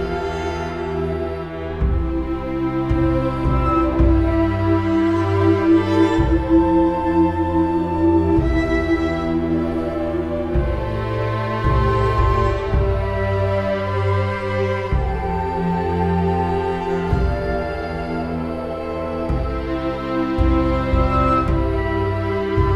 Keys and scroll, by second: 2.9 scroll, 3.8-4.6 scroll, 5.9 scroll.